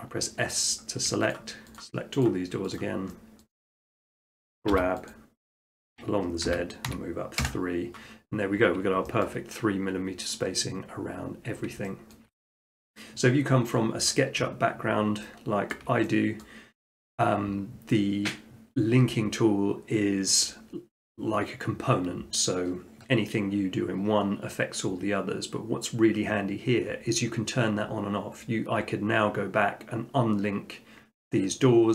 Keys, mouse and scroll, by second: 0.7 click, 1.4 shift+click, 1.8 shift+click, 2.3 shift+click, 2.8 shift+click, 3.6 shift+middle click, 3.9 shift+click, 4.7 g, 5.1 click, 6.5-6.9 typing, 7.4 Return, 8.7 middle click, 9.0 middle click, 9.3 shift+middle click, 9.4 shift+middle click, 11.8 shift+middle click, 12.2 shift+middle click, 12.8 middle click, 15.0 shift+middle click, 15.8 shift+middle click, 16.4 middle click, 17.5 middle click.